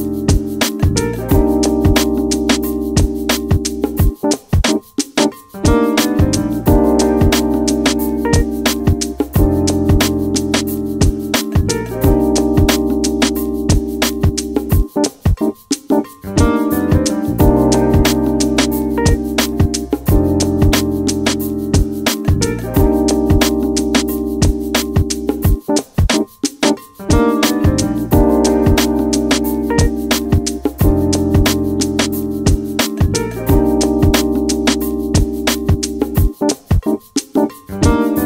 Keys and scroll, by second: 0.0-2.5 typing, 4.2 a, 6.4-8.2 typing, 12.4 d, 34.8 Escape.